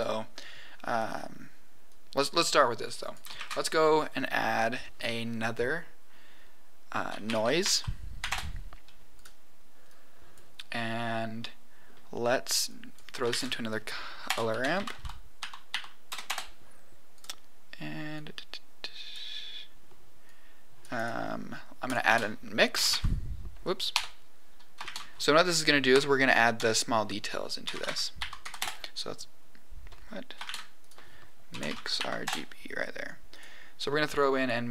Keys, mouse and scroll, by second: 1.8 click, 3.0 click, 3.3 shift+a, 9.9 click, 11.4 middle click, 12.6 click, 13.2 shift+a, 15.6 r, 18.1 click, 20.2 click, 20.9 click, 21.8 click, 22.0 shift+a, 24.8 shift+a, 30.4 shift+a, 33.8 click.